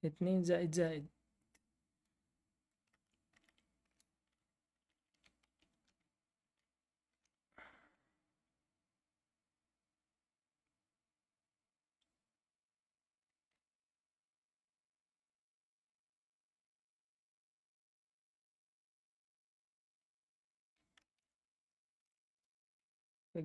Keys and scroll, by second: 3.3 Up, 3.3 Down, 3.8 Up, 3.8 Return, 4.7 Down, 4.9 Down, 5.1 Down, 5.4 Down, 5.7 Right, 6.3 Down, 7.1 Right, 21.1-22.5 typing.